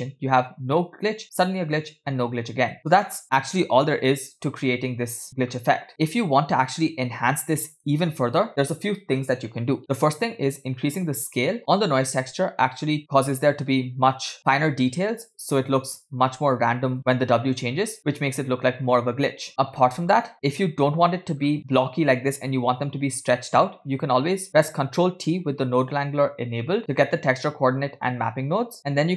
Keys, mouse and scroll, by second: 0.0 space, 2.8 space, 3.2-4.4 drag, 5.2 click, 5.9 space, 7.1 space, 10.5-11.6 drag, 13.4 space, 14.4 click, 14.4 space, 15.7 space, 16.8 space, 17.2 space, 18.5 space, 19.5 click, 19.5 space, 19.9 space, 21.5-22.6 scroll up 1, 22.6-23.3 scroll up 1, 24.0 scroll down 1, 24.0 click, 25.4 ctrl+t.